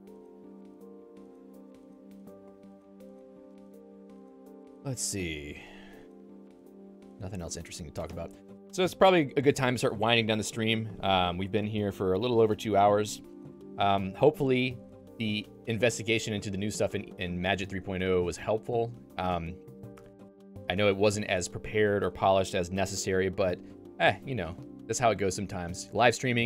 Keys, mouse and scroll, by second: 2.3 click, 2.5 Escape, 2.8 click, 8.1 click.